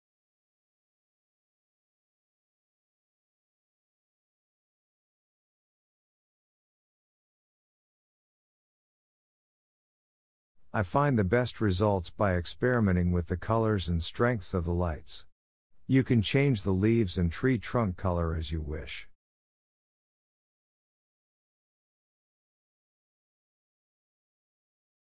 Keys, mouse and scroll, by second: 2.7 KP_0, 3.2-3.9 scroll down 1, 3.9 click, 4.8 click, 9.0-9.9 scroll up 6, 9.9-11.2 middle drag, 11.2 click, 16.4-16.8 scroll down 3, 16.8-17.7 middle drag, 17.7 click, 18.2-18.8 shift+middle drag, 18.8-19.7 scroll up 7, 19.7-20.3 shift+middle drag, 20.3 click, 20.8 click, 22.0 click, 23.0 click, 23.8 KP_0.